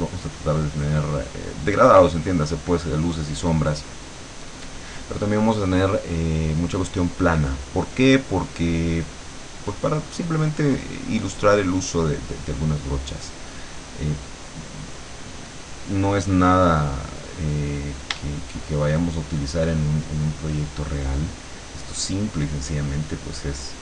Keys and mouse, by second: 6.6-10.4 drag, 11.0-15.1 drag, 17.1 click, 20.3-23.8 shift+drag.